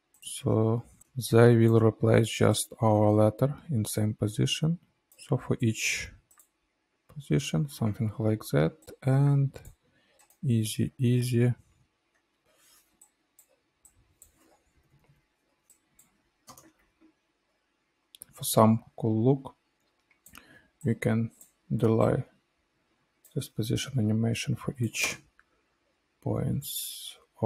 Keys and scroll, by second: 1.1 space, 15.2 space, 16.7 -, 17.3 =, 26.1 space.